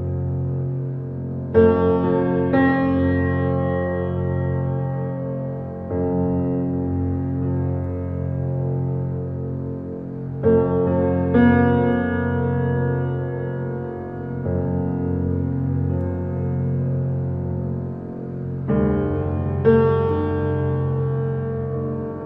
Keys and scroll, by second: 13.0 ctrl+y, 15.9 ctrl+t, 20.4 ctrl+z.